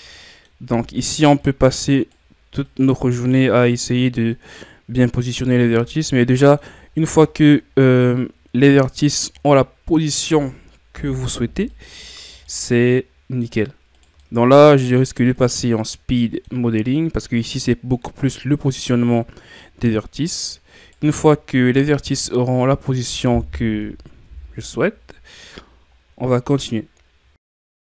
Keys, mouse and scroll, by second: 0.0 scroll up 2, 0.2-0.7 middle drag, 0.7 Tab, 1.4-2.7 right drag, 2.7 click, 3.5 right click, 4.4-5.8 drag, 5.8 scroll up 1, 5.9 middle click, 6.8-7.2 ctrl+scroll up 2, 7.2 middle click, 7.6-8.0 scroll up 2, 8.0-10.2 middle drag, 10.2 right click, 10.9 o, 11.8 click, 12.5-13.9 middle drag, 13.9 right click, 14.2-15.3 middle drag, 15.3 right click, 15.8-17.2 middle drag, 17.2-19.8 drag, 19.8 middle click, 20.8-21.9 right drag, 21.9-23.7 drag, 23.7 KP_1, 24.2 Tab, 24.6-25.9 scroll down 9, 25.9 ctrl+scroll down 3, 26.3-27.1 scroll up 6, 27.1-27.4 scroll down 2, 27.5 scroll up 1, 27.7 right click.